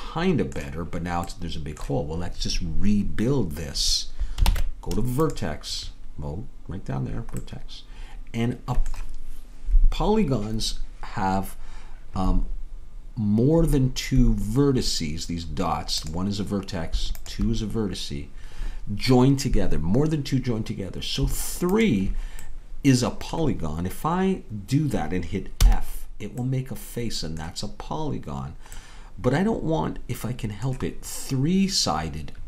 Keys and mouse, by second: 2.9 middle click, 4.5 ctrl+Tab, 16.2-21.6 drag, 22.9-25.7 drag, 22.9-25.7 middle drag, 25.7 f, 27.9-32.2 drag.